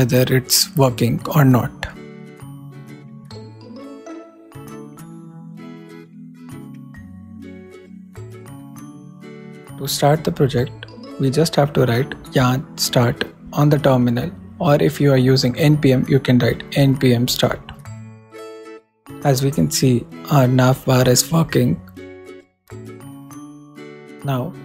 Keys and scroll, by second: 0.1 super+Return, 0.2-1.5 typing, 4.7 shift+r, 5.0 shift+/, 5.7 shift+super+/, 5.9 shift+super+s, 7.0 super+s, 8.3 super+Down, 8.5 shift+super+Right, 9.5 shift+super+Down, 10.5 super+Up.